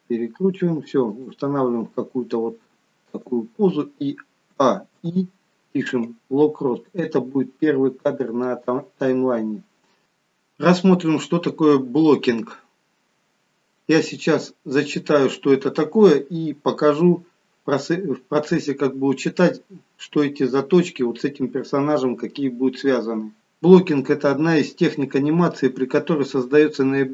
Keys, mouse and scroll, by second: 1.8 g, 4.4 a, 4.9 i.